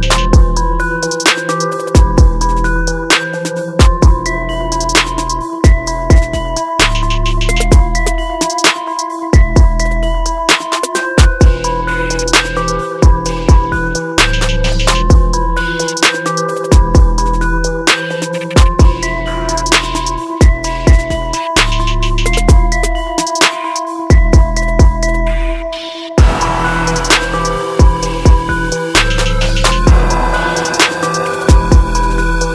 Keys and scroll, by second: 7.3 ctrl+0.